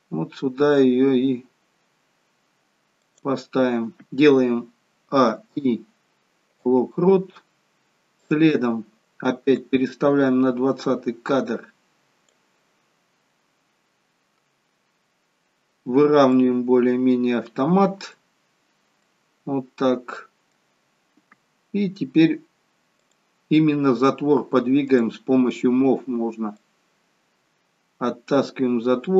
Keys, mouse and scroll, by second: 16.4 middle click, 23.0 click.